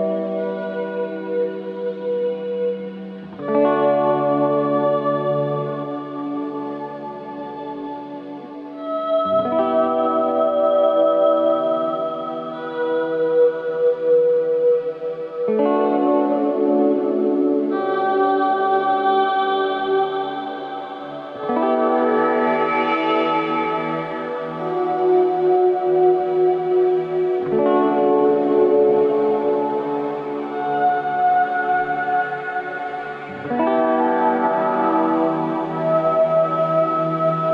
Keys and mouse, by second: 1.8 ctrl+r, 7.5-8.4 drag, 8.4 middle click, 9.1 shift+click, 9.6 middle click, 10.7 ctrl+KP_Add, 11.5 ctrl+KP_Add, 14.5-17.6 middle drag, 18.3 ctrl+KP_Subtract, 19.3 ctrl+KP_Add, 20.2-21.3 middle drag, 22.6-24.8 shift+middle drag, 28.2-30.2 middle drag, 31.1-34.8 right drag.